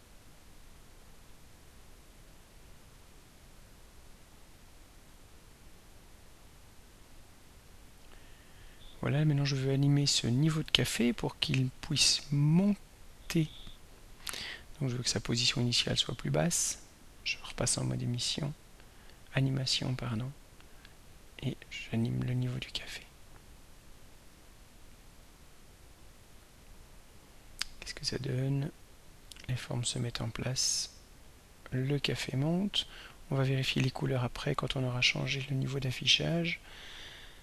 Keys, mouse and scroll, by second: 0.6 click, 3.5 click, 5.0 click, 7.2 click, 8.6 click, 11.3 ctrl+scroll down 2, 12.1 ctrl+scroll down 3, 17.6 click, 19.5-22.2 drag, 24.4 right click, 26.3 drag, 27.5-37.4 drag.